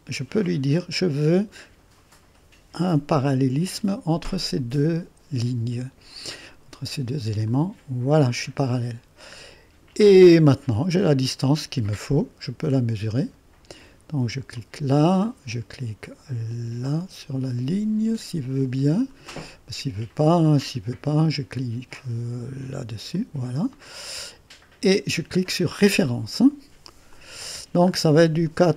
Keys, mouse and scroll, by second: 0.8 click, 3.2 click, 7.5 click, 9.2-10.4 right drag, 13.1 click, 14.6 click, 19.4-20.5 scroll down 2, 21.0 right click, 23.1 click, 25.7 click, 27.1 click, 27.9 click, 28.2 click, 28.5 right click.